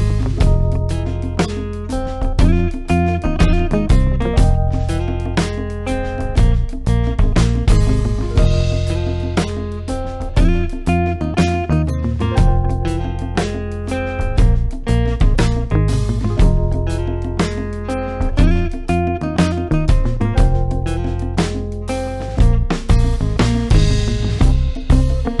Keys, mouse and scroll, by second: 0.4 click, 4.6-5.3 typing, 4.8 click, 12.5-13.3 typing, 13.5 click, 16.4 click, 24.6 right click.